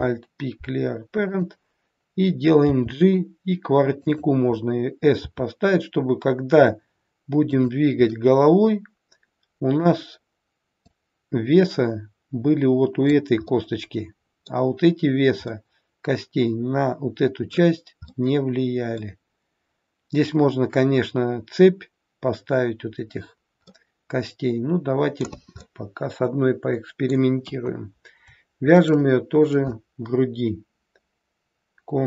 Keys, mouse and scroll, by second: 2.6 g, 5.2 s, 8.0 middle click, 10.9 click, 13.5 middle click, 15.5 middle click, 15.5-15.9 scroll up 1, 23.6 middle click, 25.5 scroll up 1, 25.6 middle click, 27.4 KP_1, 28.7 shift+click.